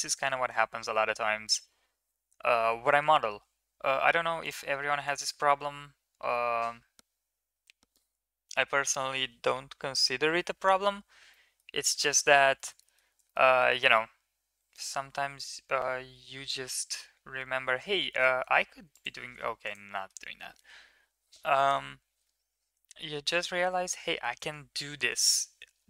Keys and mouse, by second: 0.1 shift+middle drag, 0.5 Tab, 2.4 KP_7, 4.2 click, 4.9 middle click, 11.1 middle click, 11.9 Tab, 12.4 middle drag, 12.7 middle drag, 13.1 shift+middle click, 13.3 middle click, 14.6 middle click, 15.1 s, 19.4 click, 19.7 middle drag, 22.0 Tab, 23.3 KP_1, 24.6 ctrl+KP_3.